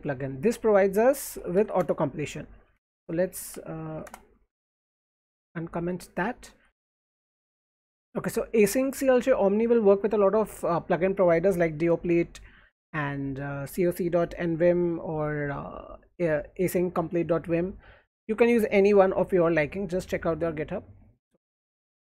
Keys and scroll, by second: 0.0 alt+2, 0.2 alt+2, 0.7-4.4 typing, 6.4 w, 6.7 w, 7.4 Left, 7.6 Right.